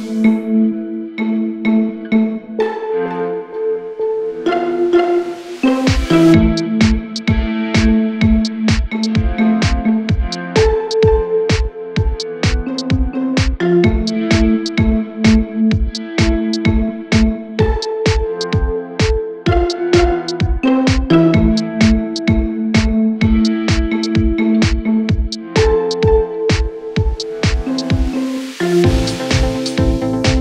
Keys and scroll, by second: 0.4 shift+Page_Up, 0.8 Escape, 10.4 c.